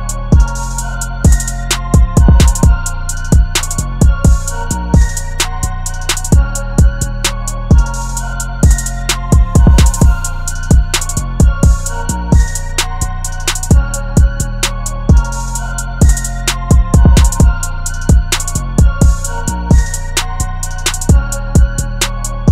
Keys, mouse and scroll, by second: 8.3 double click, 19.1 right click.